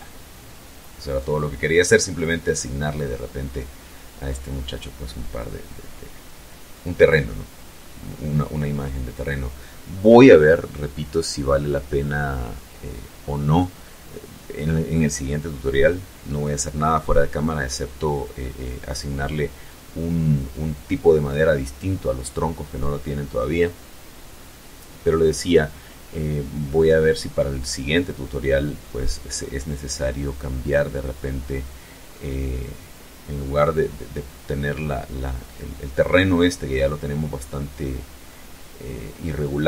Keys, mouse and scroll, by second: 0.1-1.3 drag.